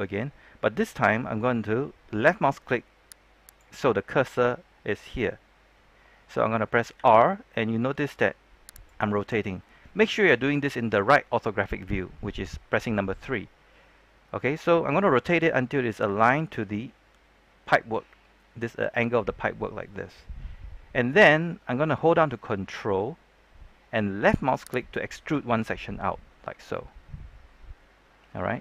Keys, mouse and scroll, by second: 3.4 click, 6.9 r, 8.7 click, 24.6 ctrl+click.